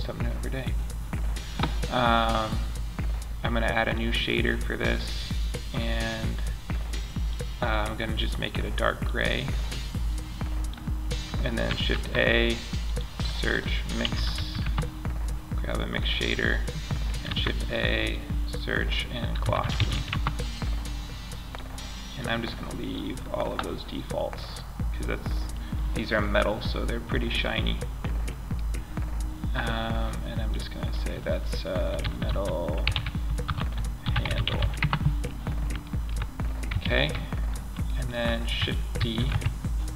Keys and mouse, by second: 3.1-4.8 drag, 11.2 shift+a, 15.4-16.6 drag, 16.6 shift+a, 19.2 s, 29.3 middle click, 33.9-35.1 drag, 35.4-36.1 drag, 36.1 ctrl+Up, 38.3 shift+d.